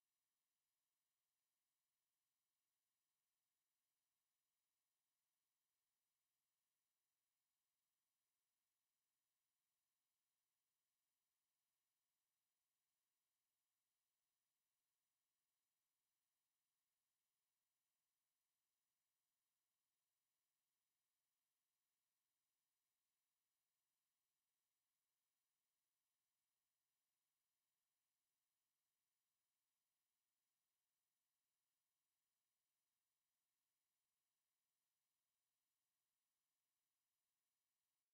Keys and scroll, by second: 14.6 ctrl+Left, 24.3 ctrl+s, 25.4 ctrl+Left, 30.7 ctrl+s.